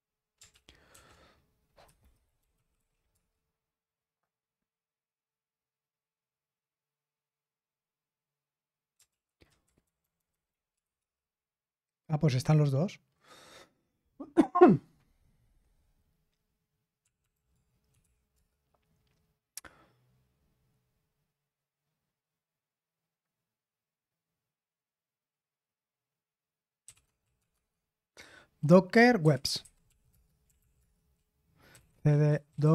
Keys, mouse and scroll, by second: 0.5 ctrl+p, 0.9 ctrl+a, 1.8 Delete, 2.1 Delete, 2.1-3.2 typing, 9.1 ctrl+p, 9.6 Left, 9.8 Left, 10.0 Left, 10.2 Left, 10.7 Left, 10.7 typing, 11.0 Return, 16.8-18.5 typing, 26.6-27.9 typing, 29.0-32.7 typing.